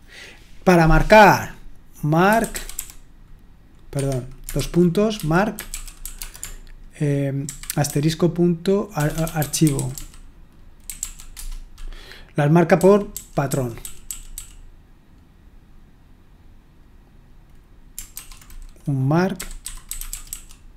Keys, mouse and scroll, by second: 2.0-3.2 typing, 3.9 Escape, 4.6-11.5 typing, 12.5-14.8 typing, 19.4-20.7 typing.